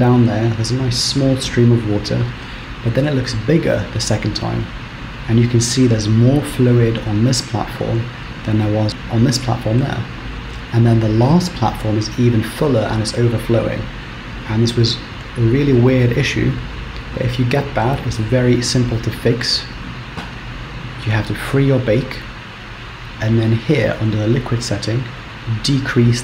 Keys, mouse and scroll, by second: 21.2 click, 22.3-24.2 scroll down 10, 25.2 click.